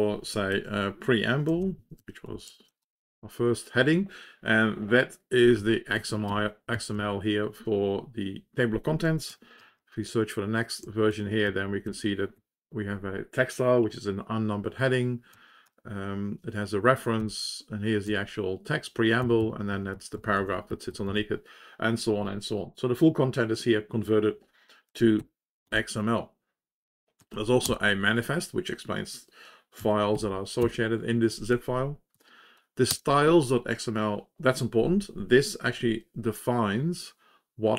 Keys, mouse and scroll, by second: 0.5 ctrl+s, 1.2-3.3 typing, 5.5 Up, 5.9 Home, 6.2 ctrl+space, 6.7 Down, 6.9 Down, 9.3 ctrl+g, 9.6 ctrl+s, 10.8 Left, 11.1 Up, 11.4 Up, 11.8 Up, 12.3 Home, 15.3 Down, 15.6 Down, 17.1 Down, 18.0 End, 19.2 Down, 19.3 Down, 19.7 Left, 19.9 Left, 20.4 Left, 20.7 Down, 20.8 Down, 21.0 Down, 27.1 Down, 27.3 Down, 27.6 Return, 32.1 Down, 33.3 Return.